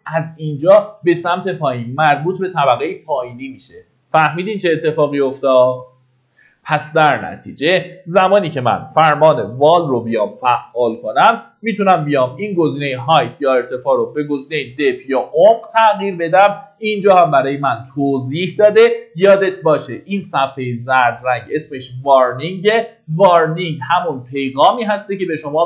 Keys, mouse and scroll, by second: 7.9-9.0 middle drag, 8.6-9.0 typing, 11.7-25.6 drag.